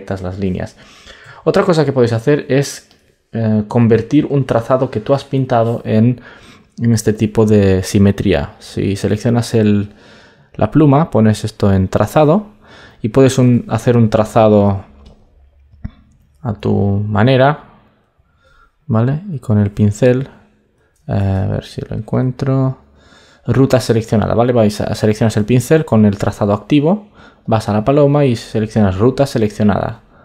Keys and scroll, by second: 7.0 super+d, 21.1 super+z.